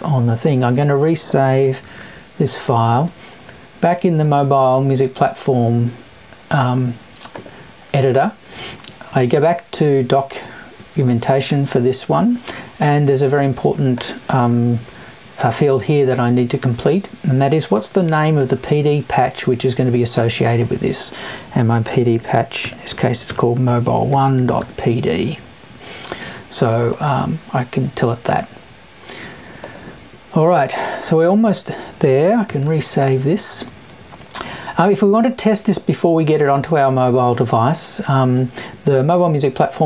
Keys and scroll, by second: 0.0 Right.